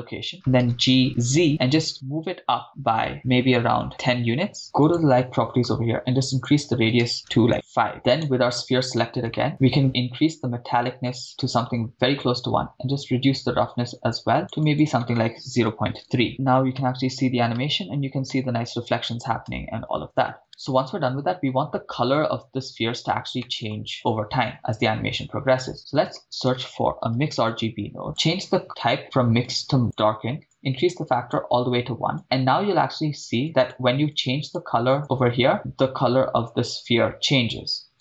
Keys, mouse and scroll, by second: 0.4 g, 1.3 z, 3.9 1, 3.9 0, 4.6 Return, 4.8 click, 6.3-7.9 drag, 8.4 click, 8.4 right click, 9.3 middle click, 9.8-12.2 drag, 13.0-14.5 drag, 14.6-16.2 drag, 16.3 shift+space, 16.8 shift+space, 17.8 shift+space, 18.4 shift+space, 19.6 shift+space, 20.4 shift+space, 23.4 middle click, 23.9-24.5 scroll up 3, 25.7 shift+a, 28.3-30.0 drag, 31.6 click, 34.1 click, 37.9 click.